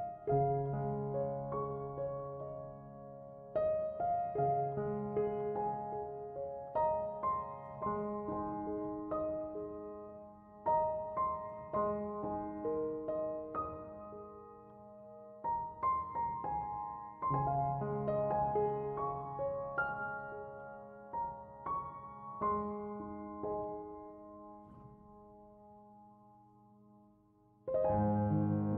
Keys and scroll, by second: 0.0 Return.